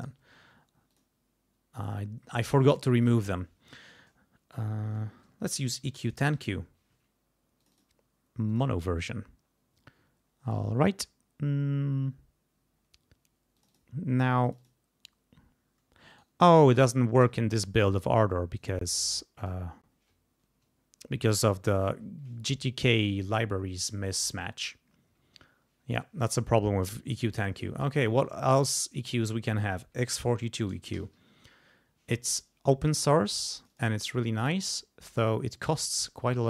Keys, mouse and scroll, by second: 0.0 right click, 0.9 click, 5.3-6.8 typing, 7.6 click, 8.5 click, 13.6 click, 14.5 click, 16.1 right click, 17.8 click, 18.6 right click, 19.4 click, 29.7-31.7 typing, 33.6 click, 34.4 click, 35.7-36.4 drag.